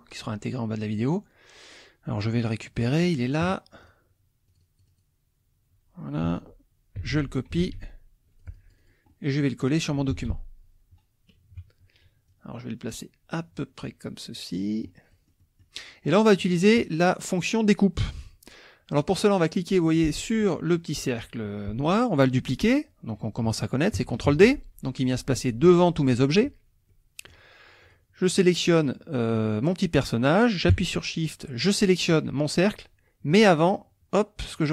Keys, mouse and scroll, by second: 0.9 click, 2.3 click, 3.8 click, 4.5 click, 7.0 ctrl+c, 7.7 alt+Tab, 8.4 click, 9.2 middle click, 9.7 click, 10.1 ctrl+v, 11.5 KP_Subtract, 12.3-15.0 drag, 15.1 middle click, 16.1 click, 18.9 click, 24.3 ctrl+d, 26.9 click, 27.8 click, 31.6 shift+click, 34.5 click.